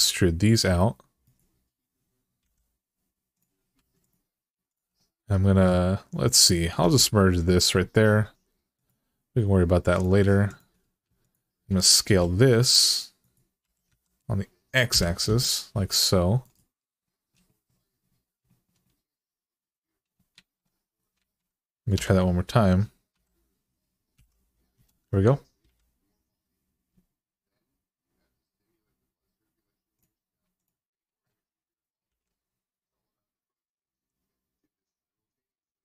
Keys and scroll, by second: 2.2 g, 3.5 1, 6.6 m, 11.9 s, 13.4 s, 13.7 x, 14.7 0, 20.1 alt+z, 20.9 alt+z, 21.7 s, 22.9 x, 23.9 0, 24.5 Return, 25.4 g, 31.9 g.